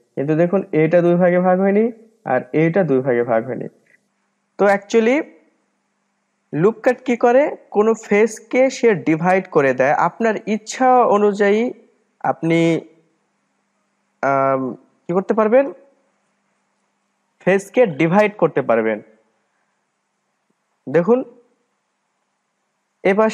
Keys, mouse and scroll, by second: 5.7-7.6 middle drag, 7.6-8.5 scroll up 1, 8.5-9.5 scroll up 1, 9.5-10.7 scroll up 1, 19.5-21.9 scroll down 2, 21.9-23.3 middle drag.